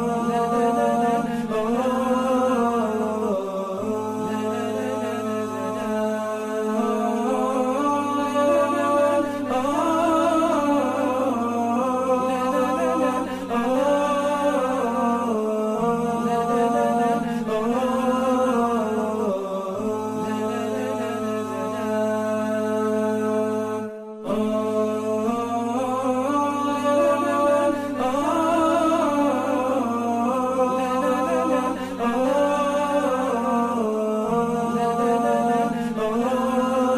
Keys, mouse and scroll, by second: 2.9-3.7 typing, 4.8-9.3 typing, 7.7 shift+click, 11.3 double click, 15.0 ctrl+x, 15.5 BackSpace, 16.1 Delete, 17.8 typing, 20.5-22.9 typing, 25.8-26.4 scroll up 1, 26.4 typing, 27.2-27.7 scroll down 1, 27.7 typing, 28.5-28.9 scroll down 1, 28.9 typing, 29.5-29.9 scroll down 1, 29.9 typing, 33.1 scroll down 1, 36.3 alt+scroll down 1, 36.6 alt+scroll up 1.